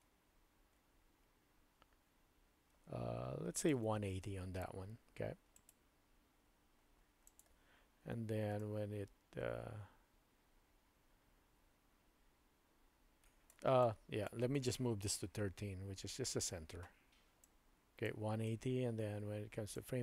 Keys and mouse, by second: 5.5-7.4 right drag, 8.6-13.5 drag, 13.8-14.3 drag, 15.2 g, 17.5-19.8 drag.